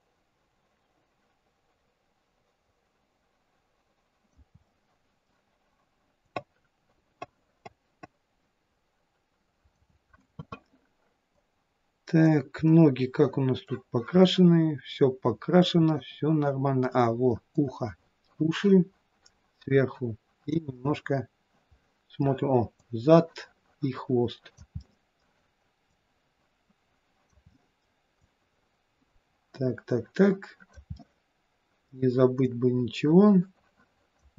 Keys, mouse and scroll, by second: 4.6 middle click, 6.4 click, 11.5 click, 12.7 middle click, 14.3 middle click, 16.4 middle click, 17.7 click, 20.8 middle click, 22.8 click, 24.8 middle click, 25.9 click, 27.5 middle click, 28.3 click, 31.0 middle click, 32.6 click.